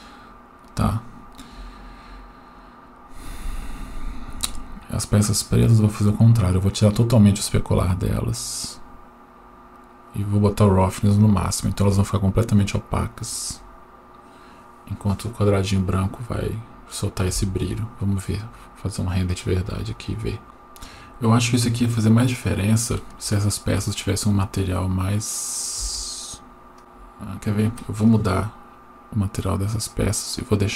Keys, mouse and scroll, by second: 2.2-3.1 scroll up 6, 3.1 scroll up 2, 4.6 click, 5.3-7.4 scroll down 5, 7.4 click, 10.0 click, 18.3 F12, 20.4 middle click, 20.4-20.8 scroll down 1, 21.9-22.5 scroll up 1, 23.2 shift+middle click, 25.9 Tab, 26.8 right click, 28.0-29.9 drag, 30.4-30.7 drag.